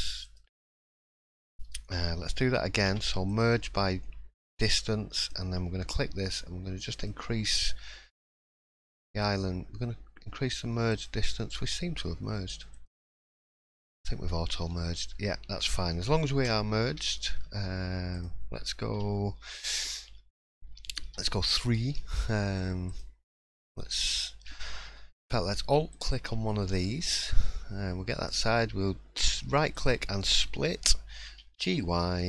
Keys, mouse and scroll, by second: 0.2 click, 0.8-1.7 scroll up 1, 2.9 m, 5.2 click, 6.9-13.2 click, 14.2-14.6 scroll up 2, 14.6-15.2 scroll down 4, 15.1 scroll up 1, 17.0 2, 18.1 click, 18.9 3, 19.3 2, 19.9 middle click, 21.0 3, 21.9 shift+middle click, 22.9 click, 26.5 middle click, 26.9-27.2 scroll down 2, 27.2-27.8 scroll up 2, 28.3 right click, 30.4-31.2 scroll down 1, 31.2 scroll down 2, 31.2 g.